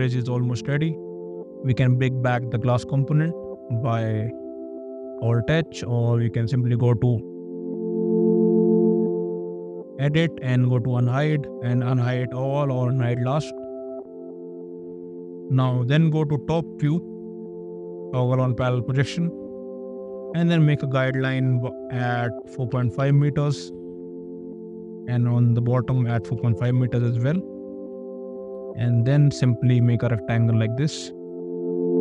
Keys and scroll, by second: 2.0 alt+h, 17.0 ctrl+1, 18.6 `, 20.0 t, 22.4-23.5 typing, 23.6 Return, 26.3 ., 27.0 Return, 27.9 r.